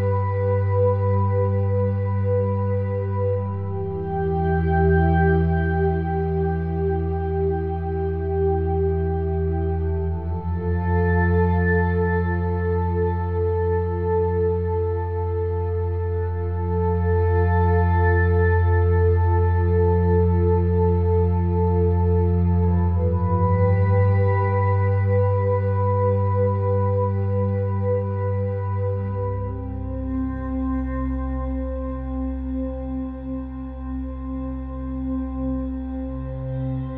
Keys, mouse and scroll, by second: 2.9 ctrl+r, 7.4 ctrl+r, 14.8 l, 14.8 s, 18.3 r, 21.9-23.7 drag, 24.2-26.0 drag, 28.8-33.2 middle drag, 33.2 s, 36.6-36.9 drag.